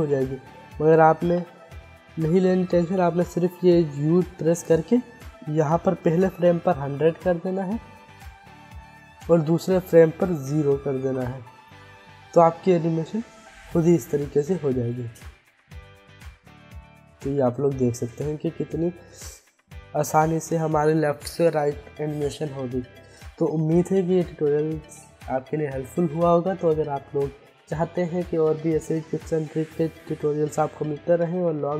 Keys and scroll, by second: 3.0 1, 6.3 1, 6.5 0, 10.9 0, 14.6 space, 17.4 space, 19.1 space, 22.3 space.